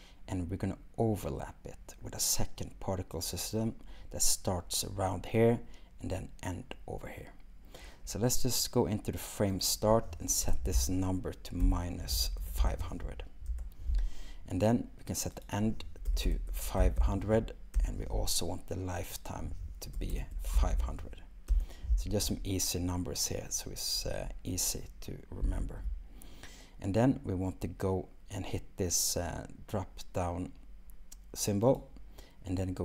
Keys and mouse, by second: 9.7-13.6 drag, 15.3-17.9 drag, 16.3 BackSpace, 19.1-21.6 drag, 20.1 BackSpace, 31.7-32.8 drag.